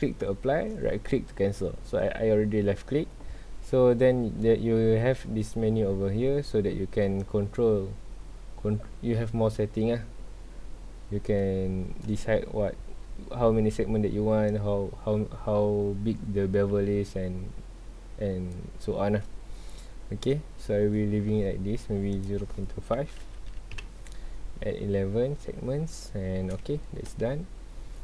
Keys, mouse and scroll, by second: 0.4-3.5 shift+middle drag, 4.6-7.2 shift+middle drag, 7.2-10.3 shift+drag, 14.5-17.6 shift+drag, 20.4-22.1 shift+middle drag, 22.1-23.8 drag, 23.8 KP_Enter, 25.8 scroll down 1, 26.5 scroll up 1, 26.9 shift+middle click, 27.3 scroll up 1.